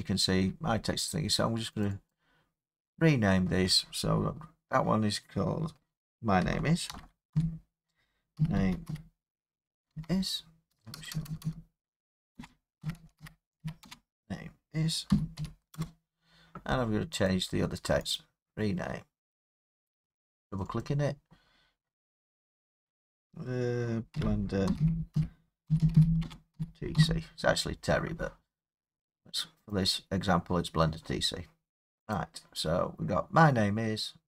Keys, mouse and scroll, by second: 1.8 click, 2.1 click, 3.9 scroll, 6.9-13.6 typing, 14.9-15.6 typing, 15.7 Return, 17.3 click, 18.2 right click, 20.6 click, 20.8 click, 24.1-26.9 typing, 29.7 click, 32.1 click, 34.0 middle click, 34.1 scroll.